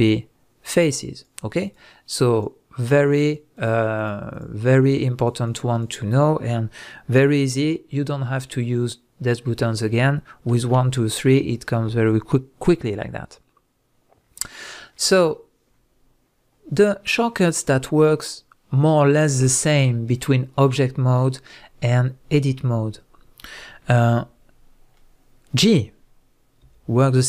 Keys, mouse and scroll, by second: 0.7 click, 1.1 click, 1.6 click, 2.3 click, 2.8 drag, 3.2 drag, 3.6 drag, 4.0 drag, 4.3 drag, 4.8 drag, 5.1 click, 5.5 drag, 5.7 click, 10.5 1, 10.7 2, 11.0 3, 25.0-27.2 middle drag, 26.6 g.